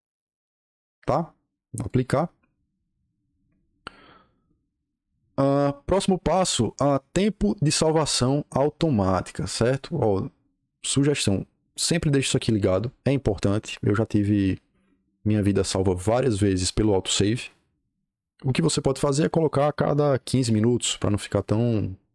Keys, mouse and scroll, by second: 1.8 click, 18.9 click, 20.2 KP_1.